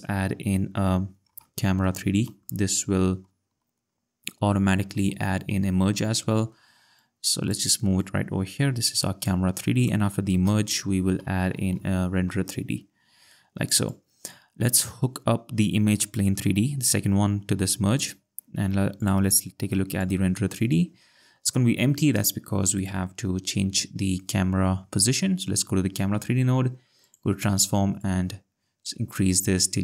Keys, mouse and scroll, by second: 1.6 c, 1.6 a, 3.4-4.4 typing, 5.7 Return, 8.0 click, 9.8 click, 11.1 r, 11.2 e, 11.6 n, 11.9 d, 12.3 Return, 13.9 click, 16.2 click, 19.0 click, 22.8 click, 27.0 click.